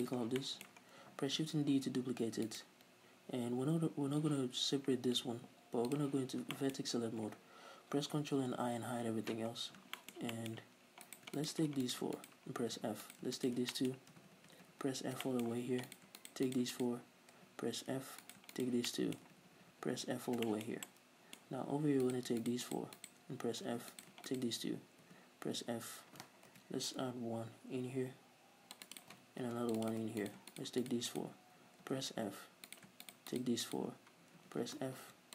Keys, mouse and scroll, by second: 0.2 scroll down 1, 0.4 middle click, 0.9-1.3 scroll down 2, 1.4 shift+d, 2.6 right click, 3.2-3.7 scroll up 2, 6.0 click, 6.6 shift+middle click, 8.0 ctrl+i, 8.7 h, 9.6 scroll down 2, 10.0-11.1 shift+middle drag, 11.1 right click, 11.4 shift+right click, 11.9 shift+right click, 12.2 shift+right click, 12.9 f, 13.1 right click, 13.4 shift+right click, 13.8-16.0 shift+middle drag, 14.2 f, 16.0 right click, 16.2 shift+right click, 16.5 shift+right click, 16.8 shift+right click, 18.0 f, 18.3 right click, 18.6 shift+right click, 18.9-20.0 middle drag, 19.4 f, 20.5-22.1 shift+middle drag, 21.5-22.1 scroll up 2, 22.1 right click, 22.4 shift+right click, 22.7 shift+right click, 23.0 shift+right click, 23.8 f, 23.9 right click, 24.3 shift+right click, 25.1 f, 26.5 ctrl+r, 29.0 right click, 29.5 ctrl+r, 29.9 click, 30.2 right click, 30.5 shift+right click, 30.9 shift+right click, 31.1 shift+right click, 31.9 f, 32.7 right click, 33.1 shift+right click, 33.3 shift+right click, 33.7 shift+right click, 34.8 f, 35.1 ctrl+r.